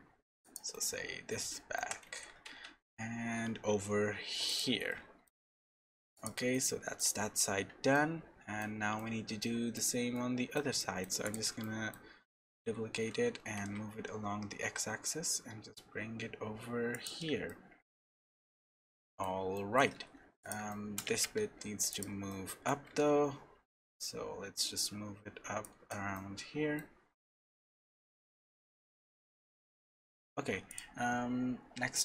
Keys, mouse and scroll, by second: 0.7 middle click, 1.8 g, 4.9 middle click, 5.2-5.6 scroll down 5, 5.6 middle click, 6.1 click, 6.5 shift+middle click, 8.9 middle click, 10.8 shift+middle click, 11.2 click, 11.6 shift+middle click, 12.6 shift+d, 17.5 shift+middle click, 18.3-19.1 scroll down 3, 18.8 middle click, 19.5 shift+middle click, 19.9-20.5 scroll up 3, 20.4 click, 20.7 shift+middle click, 21.1 Tab, 21.4 3, 21.9 click, 22.3 middle click, 22.8 g, 26.1 middle click, 27.2 scroll down 1, 27.7 shift+middle click, 28.2 middle click, 29.0 scroll up 1, 29.5 Tab, 30.0 Tab, 30.3 Tab, 30.7 click.